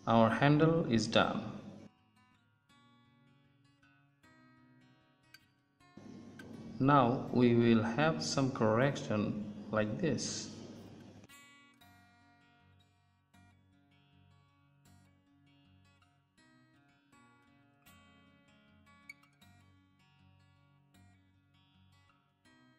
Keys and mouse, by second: 0.9 middle click, 1.1 middle click, 1.3 middle click, 1.5 Tab, 5.4 middle click, 5.5 Tab, 7.5 ctrl+Tab, 9.2 z, 11.3 z, 13.1 middle click, 16.2 right click, 17.2 ctrl+z, 18.3 middle click, 18.4 click, 19.3 middle click, 19.5 middle click, 19.9 right click, 20.6 middle click, 22.3 right click, 22.6 middle click.